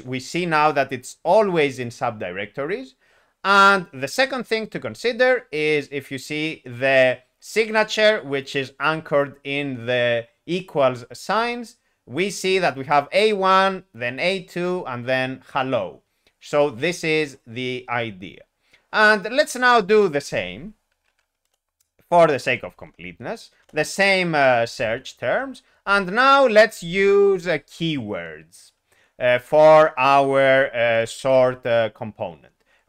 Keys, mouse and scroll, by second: 20.5 alt+x, 21.1 alt+p, 21.4 Return, 22.4 alt+p, 23.6 Return, 30.9 Return.